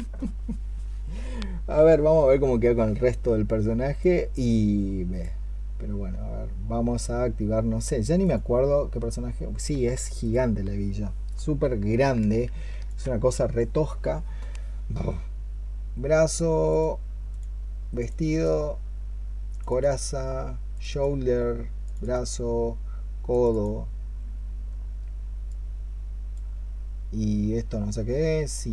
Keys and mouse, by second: 18.1 double click, 19.5 double click, 23.3 double click.